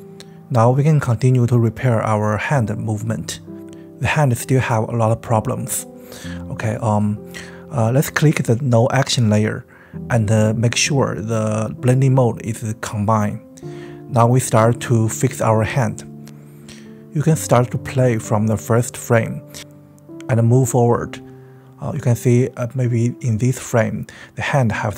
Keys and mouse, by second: 2.1 click, 3.2 click, 5.9 space, 7.8-8.7 drag, 9.1 click, 16.8-21.0 drag, 22.9 click, 23.9-24.7 middle drag, 24.7 right click, 24.8 middle click, 24.9 right click.